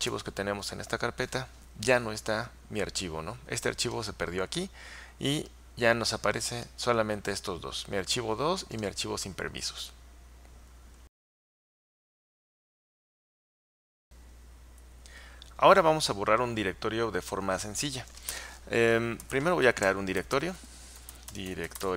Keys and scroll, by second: 0.1 typing, 19.0-21.9 typing.